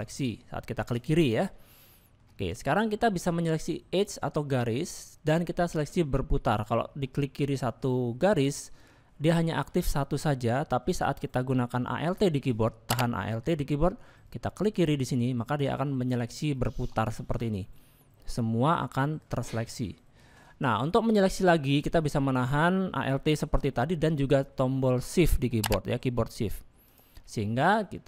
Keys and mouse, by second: 1.6 middle click, 2.7 click, 4.0 click, 8.3 click, 9.4 shift+middle click, 16.5-19.3 alt+middle drag, 20.9 shift+middle click, 21.2 middle click, 22.0 middle click, 22.8 middle click, 26.8 alt+shift+click, 27.5 middle click.